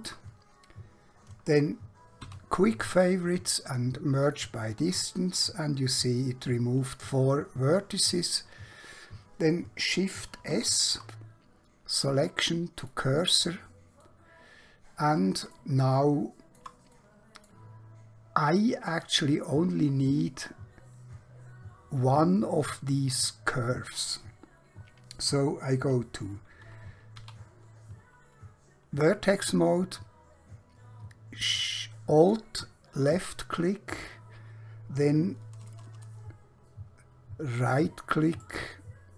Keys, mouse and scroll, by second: 2.3 q, 4.2 click, 10.1 shift+Num_Lock, 10.5 shift+s, 12.9 click, 14.1 middle click, 16.1 shift+middle click, 17.0 middle click, 18.2 scroll up 1, 27.1 1, 29.7 alt+Num_Lock, 32.2 alt+click, 38.4 right click.